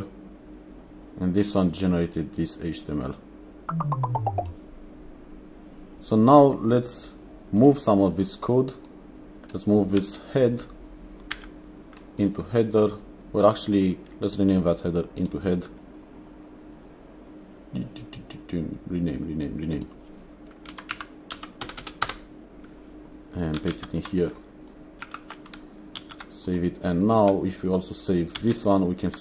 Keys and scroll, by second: 11.4 ctrl+x, 20.7 Right, 21.0 Left, 21.4 Right, 21.7 BackSpace, 22.1 Return, 23.7 ctrl+v, 26.0 ctrl+s, 28.4 ctrl+s.